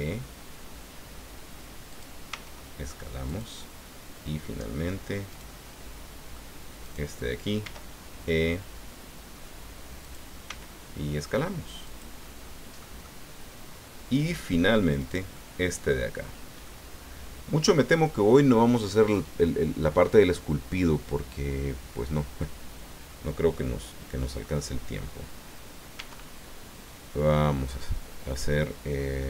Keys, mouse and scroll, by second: 1.9 click, 2.3 s, 3.3-4.9 drag, 3.6-4.9 right drag, 5.3 right click, 5.4-6.5 drag, 6.8 right click, 7.6 e, 10.0 click, 10.4 s, 11.8 click, 12.2 middle click, 15.0 right click, 15.3 middle click, 16.6-17.9 middle drag, 25.9 e.